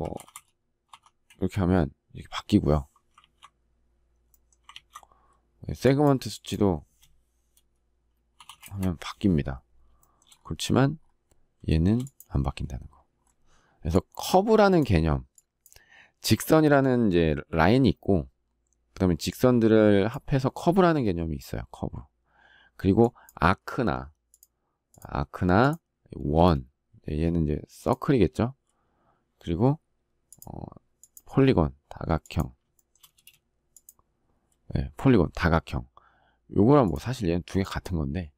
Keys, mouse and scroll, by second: 1.0 Return, 2.9 ctrl+z, 4.4 ctrl+z, 8.4 Return, 9.7 shift+middle click, 11.6 shift+middle click, 26.0 space, 32.5 shift+middle click, 32.8 space.